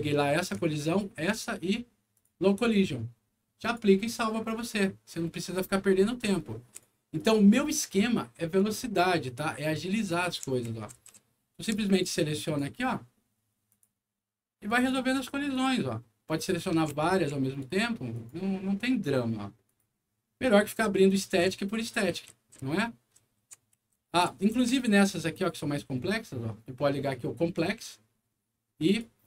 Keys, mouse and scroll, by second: 0.8 ctrl+click, 2.1 ctrl+click, 3.6 ctrl+click, 4.1-6.7 ctrl+right drag, 4.2 w, 5.5-6.3 scroll up 4, 7.1 click, 8.5 click, 9.7-11.9 right drag, 9.8-11.6 typing, 11.3 scroll down 1, 12.4 click, 13.6 click, 14.6 click, 15.4 click, 16.3-17.5 right drag, 16.4-17.3 typing, 18.1 click, 19.6 click, 20.5-21.4 typing, 20.7-24.7 right drag, 23.3 w, 23.9 s, 25.3 click, 27.5 click, 28.8 click.